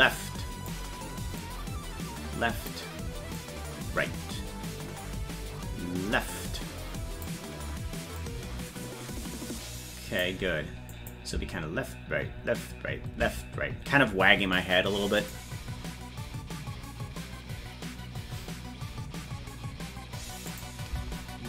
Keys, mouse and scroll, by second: 1.4-2.7 drag, 3.4-7.2 drag, 8.1-10.2 drag, 10.9 click, 11.3 space, 15.2 click, 15.2 space, 20.5 click, 20.9 space.